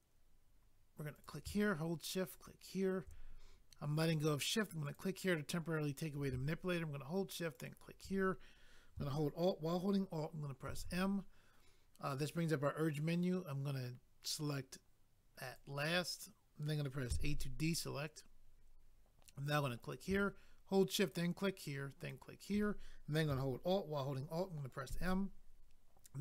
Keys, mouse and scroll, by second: 1.1 click, 1.2 click, 2.3 shift+click, 2.4 shift+click, 4.8 click, 7.6 shift+click, 10.7 alt+m, 15.4 click, 15.6 click, 19.8 click, 21.0 shift+click, 22.0 shift+click, 24.9 alt+m.